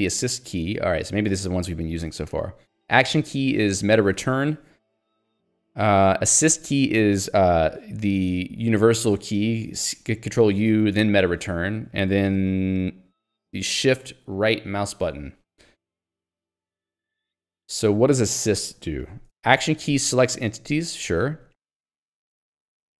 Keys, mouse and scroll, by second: 19.4 Escape, 19.8 j, 22.5-23.0 typing.